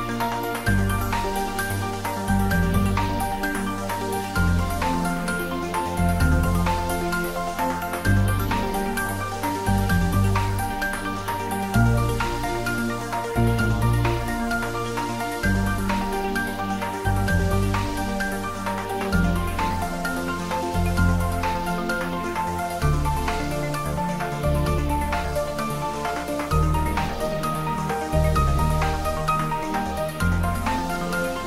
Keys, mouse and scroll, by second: 0.3 middle click, 1.4 click, 2.1-3.5 typing, 2.5 click, 3.3 click, 7.3-10.4 drag, 11.8 click, 13.1 ctrl+middle click, 13.3-14.6 typing, 14.1 click, 15.7 click, 16.0 s, 17.1 click, 18.0-18.8 middle drag, 20.2-21.1 typing, 21.8 shift+click, 22.5 shift+s, 23.4 shift+click, 23.9 shift+s, 25.6 shift+click, 25.7 shift+Tab, 27.8 ctrl+s, 28.4 Tab, 29.4 click, 31.0 click.